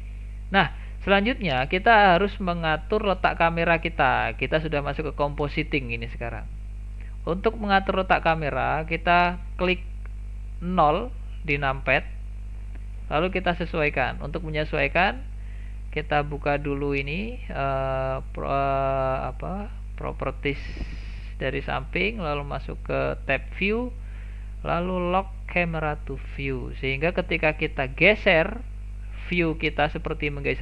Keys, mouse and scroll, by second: 0.5-3.1 scroll up 1, 3.1-3.6 scroll up 2, 3.6-4.2 middle drag, 4.2-4.5 scroll down 1, 4.5-10.9 middle drag, 10.9 KP_0, 12.5-13.0 scroll down 1, 13.0-15.7 shift+middle drag, 15.7 n, 16.6 n, 17.9-23.3 drag, 25.6 click, 27.8-29.3 shift+middle drag, 29.3-29.9 scroll up 1, 29.9-30.6 middle drag.